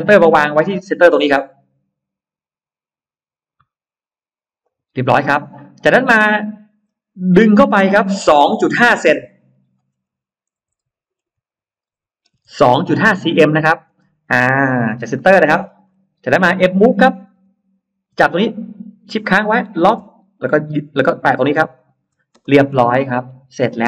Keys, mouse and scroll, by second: 4.5 click, 5.7-6.9 scroll up 3, 7.3 click, 10.5-12.7 typing, 13.2 Return, 14.1 middle click, 14.1 space, 14.6 middle click, 14.9 scroll down 2, 15.0 middle click, 15.2-16.5 scroll up 6, 16.9-17.3 scroll up 2, 17.3 m, 18.0 click, 21.6 shift+click, 22.2-22.5 scroll down 2, 22.2 space, 22.8 middle click, 23.1-23.6 scroll down 1, 23.7 middle click.